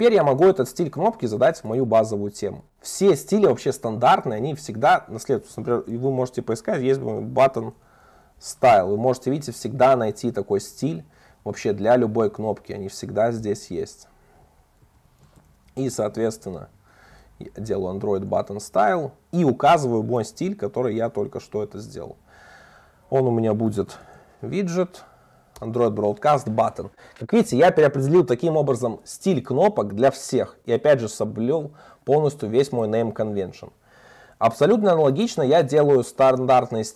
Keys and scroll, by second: 0.0 super+1, 4.5 Return, 8.6 Return, 17.6 Return, 25.6 Return, 29.6 Return, 33.2 super+1.